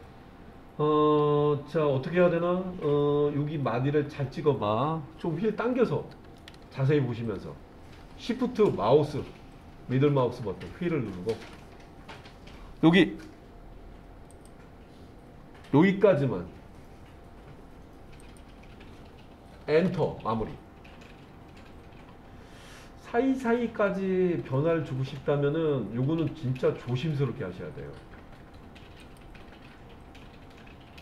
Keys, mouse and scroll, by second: 5.7-6.3 scroll up 1, 6.4-11.3 shift+middle drag, 14.3-19.9 drag, 29.0-31.0 drag.